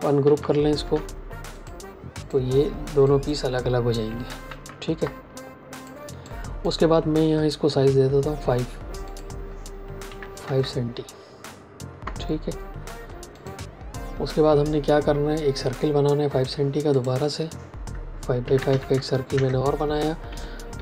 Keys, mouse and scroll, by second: 0.1 ctrl+shift+g, 1.4 click, 4.2 ctrl+z, 5.7 click, 10.0 KP_5, 10.4 KP_Enter, 13.3 click, 16.3 l, 16.8 click, 18.3 KP_5, 18.5 Tab, 18.6 KP_5, 19.2 KP_Enter, 20.2 v.